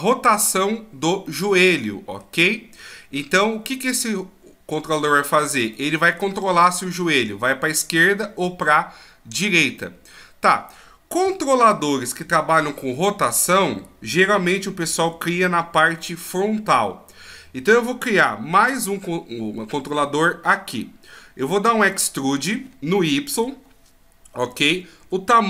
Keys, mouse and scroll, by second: 1.3 middle click, 5.7 middle click, 9.8 middle click, 11.2 KP_3, 21.8 e.